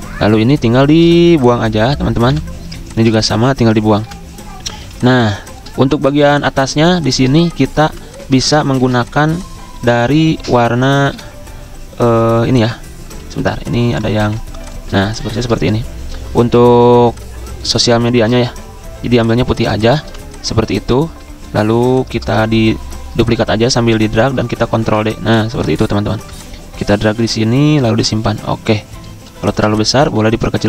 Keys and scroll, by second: 1.0 ctrl+2, 2.0 Delete, 4.0 Delete, 4.7 z, 7.8 v, 8.7 ctrl+alt+2, 9.9 ctrl+z, 11.0 Delete, 13.4 ctrl+c, 14.1 ctrl+f, 16.5 l, 18.3 d, 19.4-20.5 typing, 22.4 ctrl+z, 22.7 ctrl+z, 24.6 ctrl+d, 27.9 z, 30.1 v.